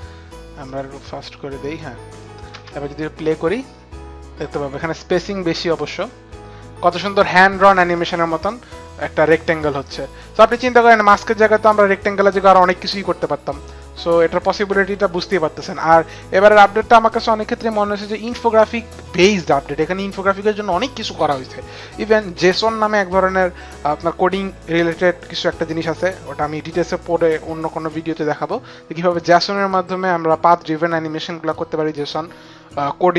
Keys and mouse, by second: 0.6 click, 2.2 click, 2.5 space.